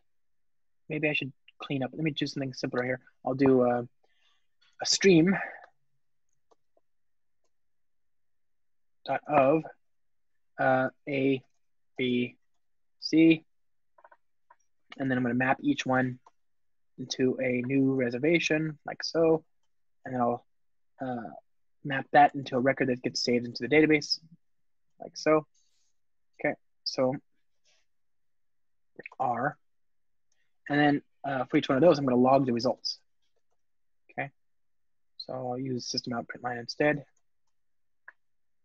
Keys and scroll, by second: 8.5 Return, 15.6 Return, 32.1 Return, 36.3 alt+shift+Left, 37.4 Return.